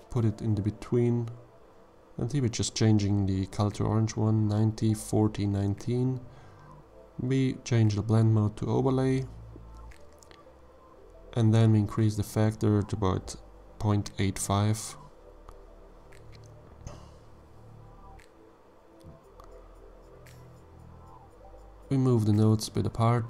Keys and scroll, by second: 3.7-5.2 typing, 5.9 Return.